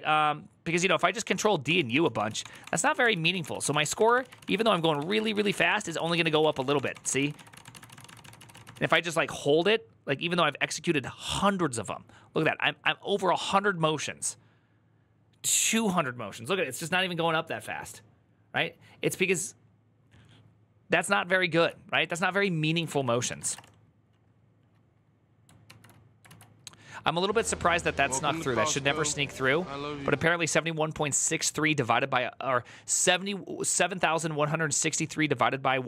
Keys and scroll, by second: 0.0-1.3 typing, 9.3 ctrl+u, 22.7 ctrl+d, 22.8 ctrl+d, 23.0-23.8 typing, 25.5 Return, 25.5 alt++, 25.5 typing, 26.1 alt+{.